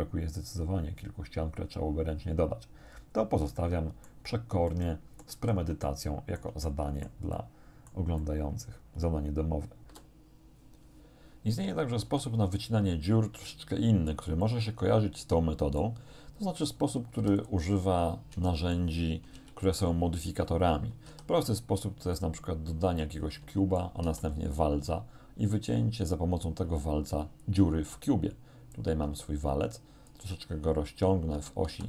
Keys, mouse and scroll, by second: 2.8 scroll down 1, 3.6 shift+middle click, 4.7 shift+middle click, 5.4 z, 5.9 shift+middle click, 6.0 shift+click, 7.0 click, 8.2-10.0 drag, 10.0 Return, 12.1 z, 14.4-16.0 middle drag, 17.2 x, 17.4 click, 18.5 shift+middle click, 18.6 shift+click, 19.4 shift+1, 21.1 shift+a, 22.2 click, 23.0-23.5 scroll down 2, 23.7 shift+middle click, 24.1 shift+a, 27.4 click, 28.8-30.3 drag, 31.4 s, 31.7 z.